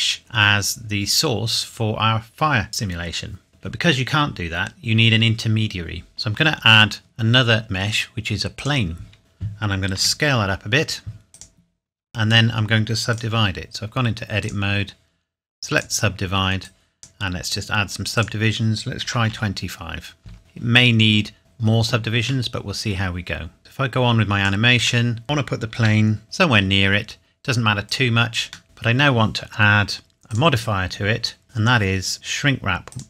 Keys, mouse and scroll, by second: 3.5 click, 6.1 shift+Num_Lock, 6.1 scroll down 1, 6.4 shift+a, 8.6 click, 9.2 KP_7, 10.0 s, 11.3 click, 12.0 Tab, 13.1 right click, 14.4 click, 19.0 KP_2, 19.3 KP_5, 20.2 KP_Enter, 21.4 Tab, 22.5 middle click, 23.6 click, 25.1 middle click, 25.2-25.8 scroll up 1, 25.8 g, 26.2 z, 27.9 click, 30.3 click, 31.5 click, 32.9 click.